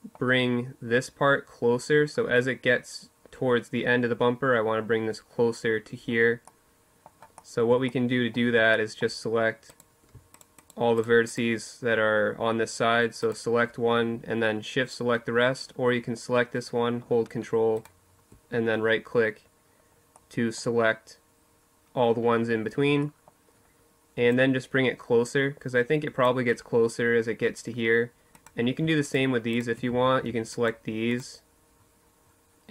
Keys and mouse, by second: 5.2-8.4 middle drag, 8.4-18.7 right drag, 18.9-20.7 right drag, 21.8-23.1 right drag, 23.1-25.0 drag, 27.1-32.7 drag, 28.6 z, 32.4 z.